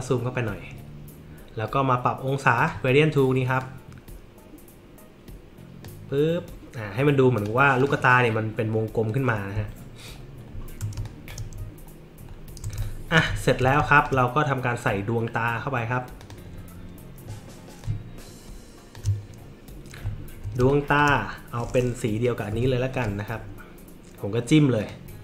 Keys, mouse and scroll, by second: 2.6 click, 3.6-5.8 drag, 7.3 click, 7.8 click, 9.6 alt+middle click, 9.6 alt+scroll up 1, 10.5 alt+middle click, 10.5-10.8 alt+scroll up 1, 10.9 space, 11.0 click, 12.3 alt+scroll up 4, 12.8 space, 12.8-13.1 drag, 13.4 alt+middle click, 13.8 space, 13.9 click, 16.2 click, 17.8-18.9 alt+shift+drag, 20.6 space, 20.7 click, 22.5 i, 22.9 click, 24.8 click.